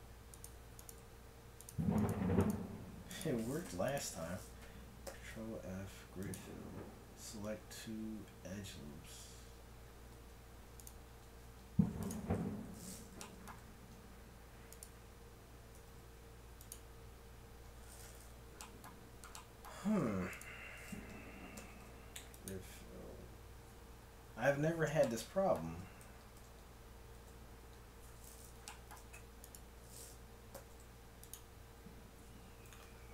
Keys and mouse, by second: 0.9 g, 2.6 g, 2.9-5.0 right drag, 5.0 ctrl+f, 5.0 click, 11.4 ctrl+Tab, 13.5 g, 15.8 ctrl+f, 21.6 ctrl+f, 26.1 a, 26.4 a, 27.3 ctrl+n, 29.4-31.2 drag, 30.6 ctrl+f, 32.9 ctrl+Tab.